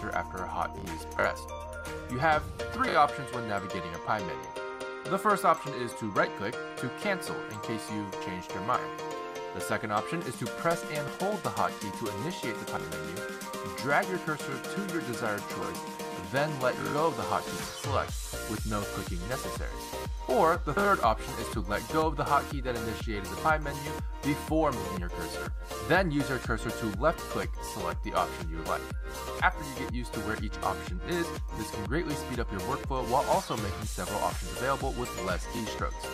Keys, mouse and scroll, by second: 0.0 t, 4.9 z, 9.0 z, 22.2 z, 23.7 z.